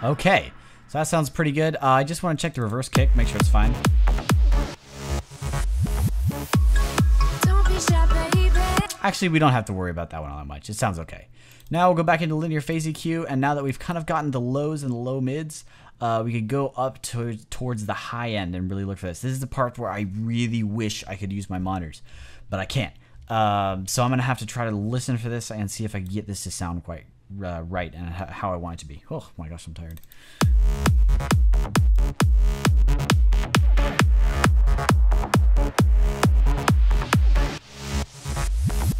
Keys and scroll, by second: 8.6 space.